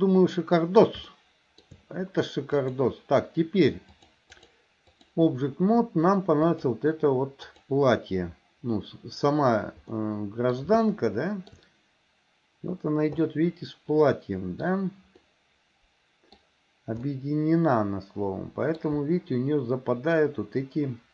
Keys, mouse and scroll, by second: 1.1 shift+middle click, 2.7-4.1 drag, 4.4 click, 6.4 click, 9.9-10.6 middle drag, 10.9-11.6 shift+middle drag, 13.3-14.7 middle drag, 15.3-16.4 middle drag, 17.1-18.8 middle drag.